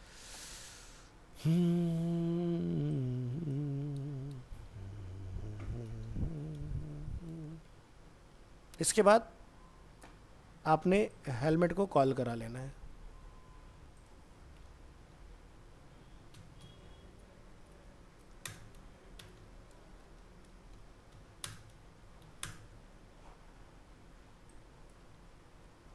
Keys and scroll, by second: 4.1 ctrl+c, 4.7 alt+Tab, 6.3 ctrl+Home, 7.3 ctrl+v, 8.4 alt+Tab, 12.3 ctrl+c, 12.8 alt+Tab, 22.7 ctrl+v, 25.2 ctrl+x.